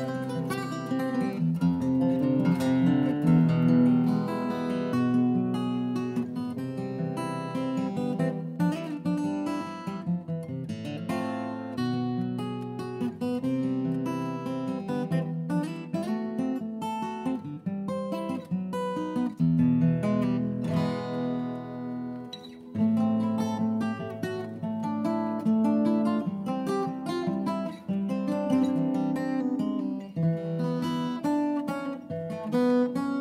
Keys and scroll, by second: 5.0-7.6 typing, 19.3 Return, 21.4 Down, 21.7 Down, 23.6 Down, 26.3 ctrl+d, 27.8 shift+Left, 28.0 Escape, 28.8 shift+Right, 29.1 Left, 29.1 Left, 29.7 Left.